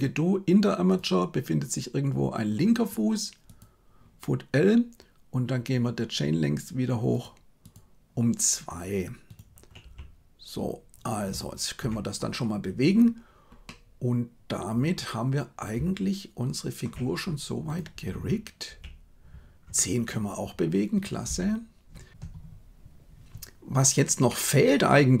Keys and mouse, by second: 1.0-3.5 drag, 9.8 g, 13.6-16.8 middle drag, 18.0 r, 21.2 r, 24.3-25.2 middle drag.